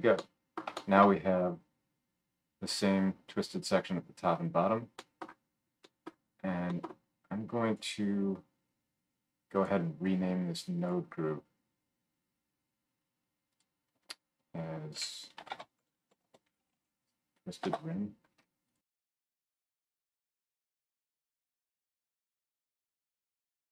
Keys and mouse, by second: 7.7-9.5 drag, 9.5 middle click, 9.6-10.8 drag, 10.8-18.8 middle drag, 18.8-20.6 drag, 20.6 right click, 21.6-22.7 right drag, 22.7-23.7 drag.